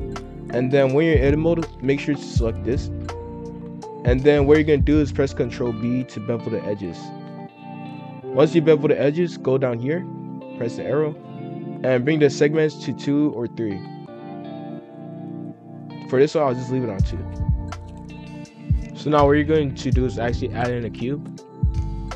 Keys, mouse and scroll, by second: 3.2-5.8 drag, 5.8 ctrl+b, 10.2-12.4 drag, 15.2-18.8 drag, 18.8 F3, 20.8 shift+a.